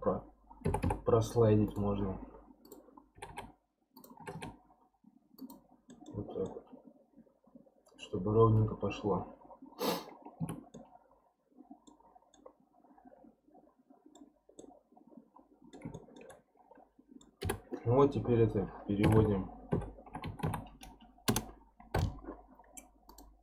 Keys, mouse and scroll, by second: 0.6 g, 2.7 click, 3.1 g, 4.2 g, 5.8 scroll up 1, 5.9-6.5 scroll down 2, 5.9 middle click, 6.5-9.5 middle drag, 10.1 scroll down 4, 10.4 Tab, 10.7-12.0 middle drag, 12.0 scroll up 6, 12.3-14.3 middle drag, 14.3 scroll down 1, 14.6-17.5 middle drag, 17.5 F3, 23.1 click.